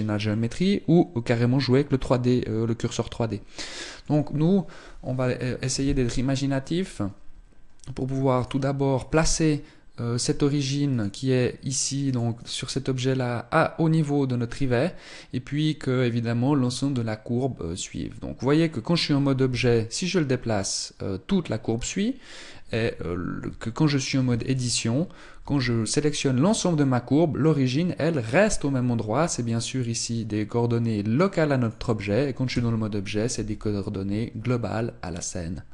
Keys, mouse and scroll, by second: 5.4 KP_1, 6.4-8.0 scroll up 1, 8.0 right click, 10.5 right click, 11.7 right click, 19.1 g, 23.1 Tab, 23.9 a, 24.2 a, 25.0 g, 31.3 click, 32.2 Tab, 32.6 g.